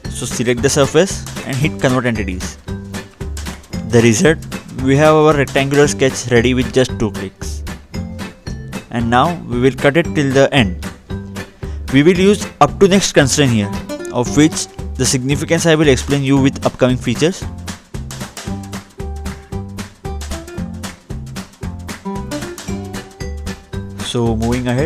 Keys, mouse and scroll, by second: 0.2 double click, 2.5 click, 3.6 middle click, 4.8-5.2 scroll down 2, 5.9-6.4 scroll up 2, 7.6 click, 9.2-9.6 scroll up 2, 10.1 scroll down 2, 11.8 click, 12.9-13.2 scroll up 2, 13.2 scroll down 2, 13.7-14.3 scroll up 1, 14.3 scroll up 1, 14.6 scroll down 2, 16.0 click, 21.0 scroll up 2, 22.1-23.3 scroll down 2.